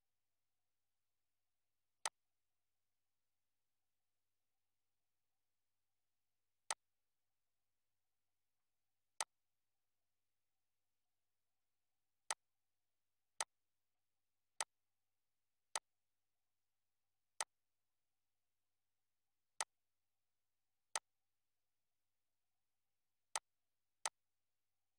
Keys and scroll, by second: 7.8 ctrl+z, 21.9 Down.